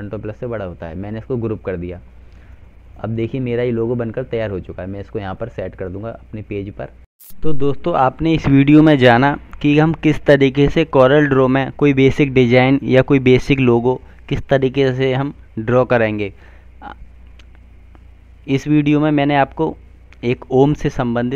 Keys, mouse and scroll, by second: 0.4 click, 0.7 double click, 2.3 click, 6.9 F4, 8.4 F9.